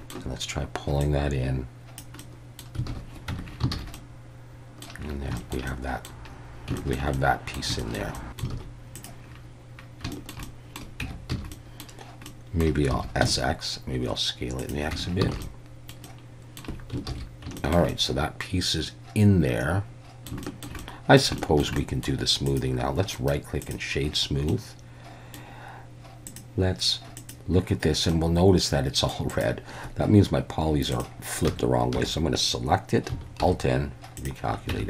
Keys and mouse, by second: 1.0-2.0 drag, 2.2 middle click, 2.9 alt+a, 3.3 Tab, 3.7 alt+a, 3.9-4.8 drag, 5.4 shift+click, 5.7 drag, 5.8 middle drag, 6.8 shift+middle drag, 7.1-7.6 middle drag, 7.8 shift+middle drag, 8.1 middle click, 8.6 alt+a, 9.0 click, 10.1 shift+middle drag, 10.4-10.8 middle drag, 11.0 Tab, 11.3 a, 11.5 middle click, 12.3 middle click, 12.9 s, 13.2 x, 14.6 click, 14.9 Tab, 15.3 alt+a, 15.4-15.9 middle drag, 16.1-16.6 middle drag, 17.1 ctrl+s, 17.6 shift+middle drag, 17.9-20.3 middle drag, 20.4 shift+middle drag, 20.8-21.2 middle drag, 21.4 shift+middle drag, 21.8 middle click, 22.5 click, 23.1 right click, 24.5-25.4 middle drag, 26.3-27.6 drag, 28.1-29.1 middle drag, 29.3 click, 31.5 Tab, 32.0 a, 33.4 alt+n, 34.7 Tab.